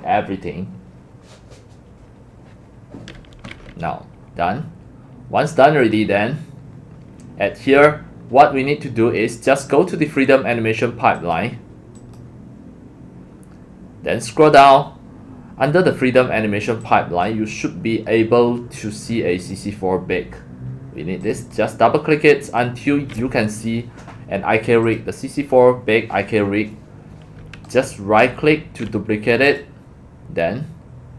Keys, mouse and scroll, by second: 8.2 click, 8.4-8.8 drag, 11.2 click, 12.0 click, 13.2 scroll, 13.3 scroll down 1, 13.3 scroll down 1, 13.4 scroll, 13.6 scroll down 1, 13.7 scroll down 1, 14.0-15.1 scroll down 12, 15.8 scroll, 16.8 middle click, 17.0 middle click, 17.5 click, 19.4 click, 21.0-21.5 drag, 23.0 click, 24.8-25.2 drag, 27.8 right click, 29.4 click, 30.7-31.1 drag.